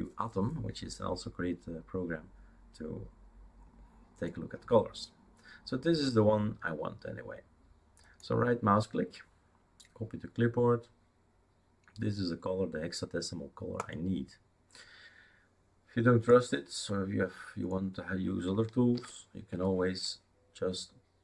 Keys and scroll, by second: 19.0 ctrl+v, 19.5 Return.